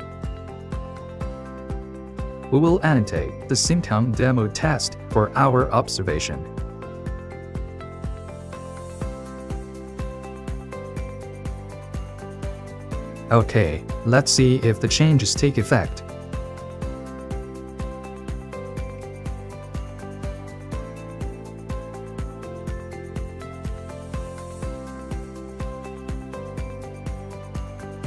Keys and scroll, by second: 0.0 ctrl+c, 12.0 ctrl+s, 12.2 ctrl+2.